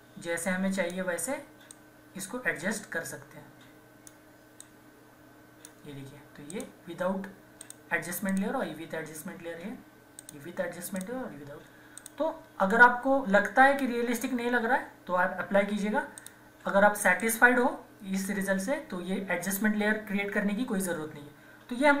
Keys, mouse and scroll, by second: 0.6 typing, 7.3 typing, 16.2 click.